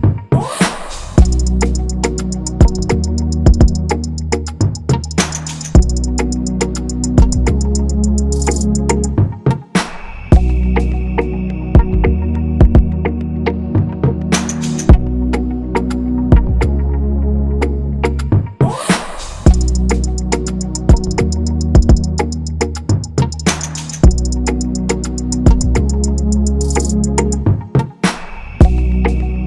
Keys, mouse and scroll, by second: 0.4 Return, 1.5 Return, 2.4-4.0 scroll down 1, 4.3 Return, 4.9 ctrl+a, 7.7 alt+Up, 7.9 alt+Up, 8.2 alt+Up, 15.1 ctrl+-, 15.2 ctrl+-, 15.3 ctrl+-, 15.7-18.0 scroll down 1, 29.0 right click.